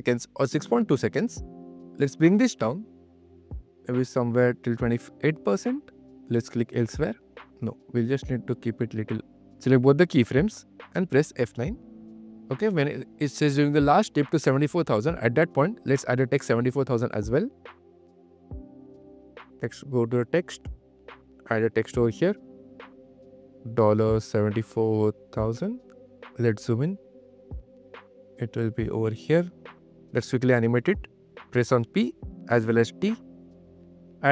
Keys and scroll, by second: 11.3 F9, 11.8 q, 17.9 u, 18.4 q, 31.0 q, 31.8 p, 32.3 q.